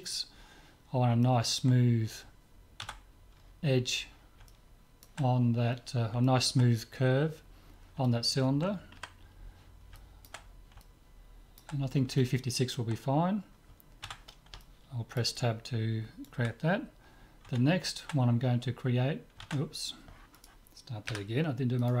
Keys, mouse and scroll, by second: 1.3-4.1 middle drag, 2.8 Tab, 4.5-8.0 middle drag, 8.1 middle click, 9.0 KP_5, 10.1-14.1 middle drag, 14.1 Tab, 14.7-17.2 middle drag, 20.4-22.0 right drag, 21.1 Delete.